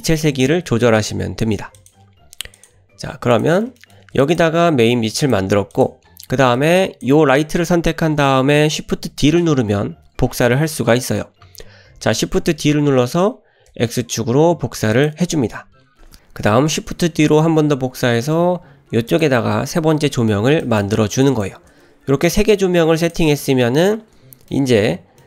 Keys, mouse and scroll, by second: 1.8-2.7 drag, 3.3 click, 3.8 shift+middle click, 4.2 drag, 4.8 g, 5.7 click, 6.6-7.1 drag, 12.8 shift+d, 17.0 shift+d, 20.6 shift+drag, 21.2 shift+drag, 23.0 click, 23.6-23.9 shift+middle drag, 24.4 scroll down 1, 24.5-24.8 middle drag, 25.2 middle click.